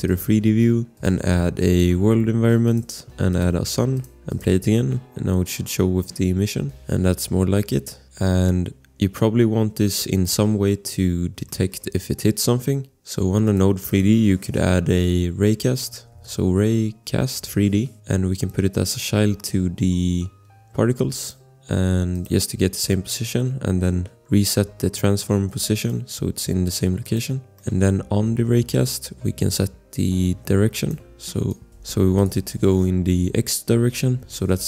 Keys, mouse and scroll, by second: 8.8 scroll, 9.1 click, 11.4 click, 11.7 click, 13.1 click, 15.7-16.9 typing, 17.3 Return, 18.9 click, 22.1 click, 25.8 click, 27.4 scroll, 27.8 click, 29.9 click, 31.5 click, 31.7 click, 31.9 Return, 32.1 click, 33.6-34.5 typing.